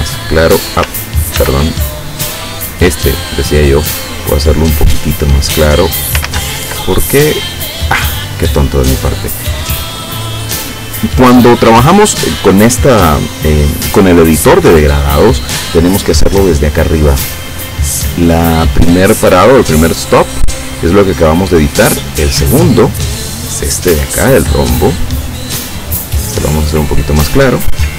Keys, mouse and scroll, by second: 1.4 ctrl+z, 2.8 click, 4.9 click, 6.3 ctrl+z, 9.4-11.1 drag, 16.6-17.8 drag, 20.4-22.3 drag, 25.1 click, 26.6-27.9 drag.